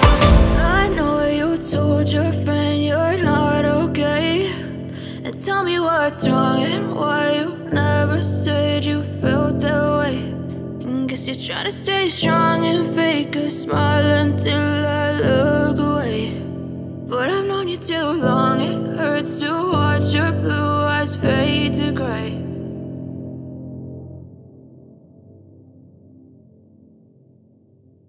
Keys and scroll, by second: 0.8 shift+F2, 1.0 Escape, 3.8 ctrl+Page_Down, 4.5 ctrl+Page_Up, 5.6 shift+Page_Up, 8.1 c, 10.0 F3, 14.6 ctrl+Page_Down, 15.1 ctrl+Page_Up, 15.6 Up, 16.0 c, 16.7 shift+F2, 16.8 Escape, 19.0 F3, 19.3 Escape, 19.8 Escape, 23.4 c, 23.9 shift+F2, 24.1 F9.